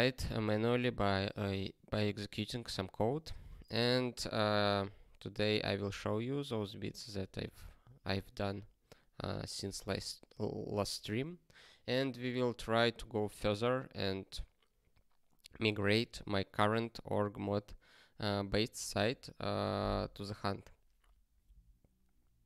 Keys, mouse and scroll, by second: 7.0 ctrl+n, 7.3 ctrl+n.